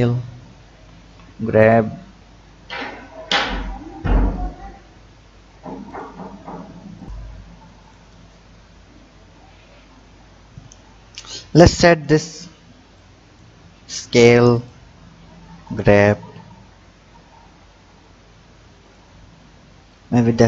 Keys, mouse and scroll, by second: 0.2-0.8 scroll up 2, 1.0 g, 11.0-11.4 scroll up 2, 13.0-13.8 drag, 13.8 s, 15.3 g, 19.9 click.